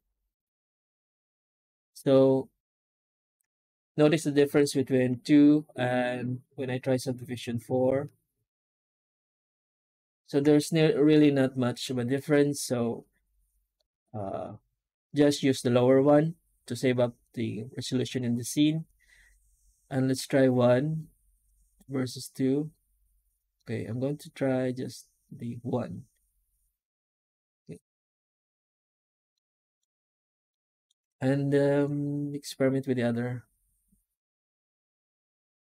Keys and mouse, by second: 29.2 middle drag, 29.6 middle click, 30.4-30.7 middle drag, 30.9 F9.